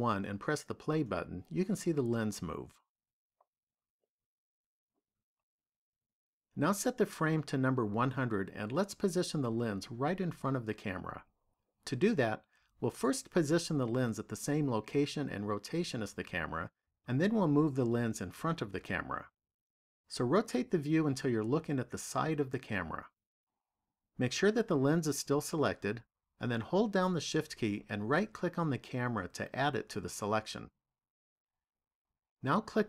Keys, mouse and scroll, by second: 0.0 click, 1.9 click, 4.6 click, 7.4 click, 9.5 KP_0, 20.0-21.2 scroll down 1, 21.2 middle click, 28.0 shift+right click.